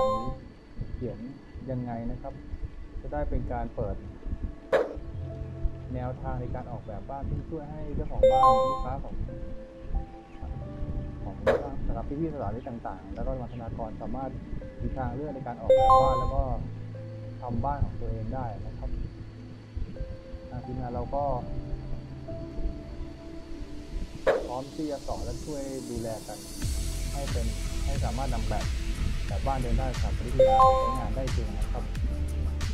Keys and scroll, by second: 0.1 w, 5.7 a, 8.4 a, 8.8 w, 12.5 w, 16.2 w, 18.2 d, 19.5 w, 20.3 d, 20.6 w, 24.8-25.8 typing, 26.9 a, 28.9 w, 31.9 w.